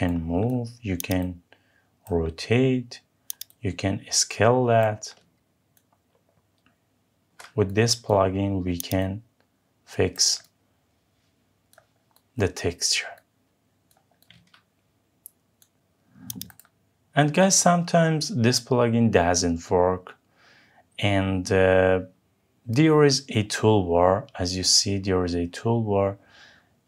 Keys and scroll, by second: 5.7 ctrl+z.